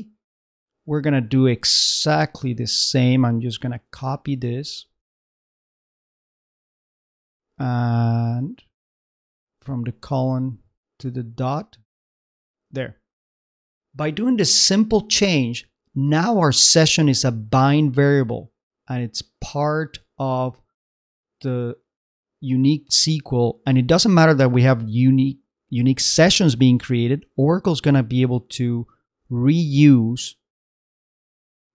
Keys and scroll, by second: 2.2 shift+Left, 3.2 shift+Right, 4.4 shift+Right, 5.2 shift+super+Right, 5.6 shift+super+c, 6.1 super+c, 8.2 shift+Right, 9.6 shift+Left, 9.9 shift+Right, 11.1 shift+Right, 11.7 shift+super+Right, 11.9 shift+super+v, 12.6 super+v, 13.3 super+Right.